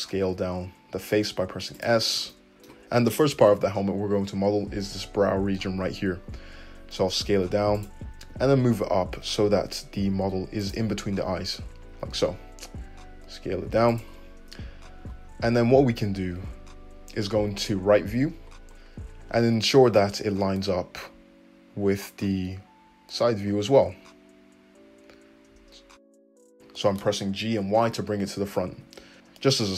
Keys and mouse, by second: 7.3 s, 8.2-28.8 drag, 8.2 g, 12.0 s, 15.4 2, 17.4 `, 19.7 g, 28.7 `.